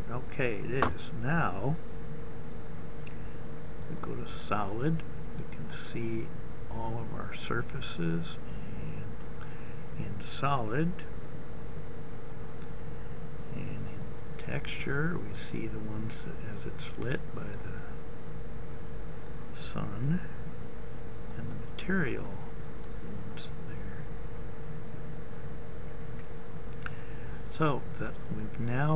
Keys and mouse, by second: 2.2 click, 3.6 middle click, 7.3 middle click, 7.7 middle click, 9.6 middle click, 10.2 middle click.